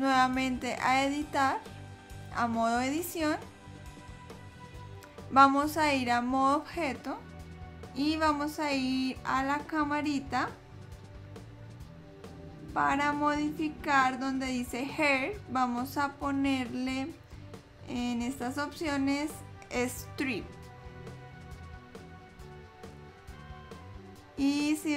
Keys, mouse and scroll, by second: 1.2 click, 6.4 click, 9.7 click, 16.0 click, 23.2 click.